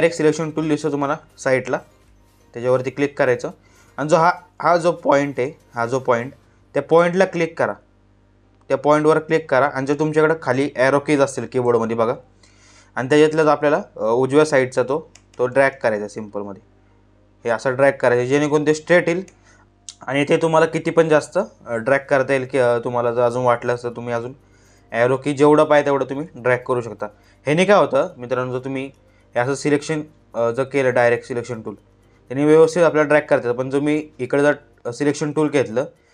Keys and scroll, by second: 4.1 space, 13.5 Right, 23.1 Right, 25.3 Left.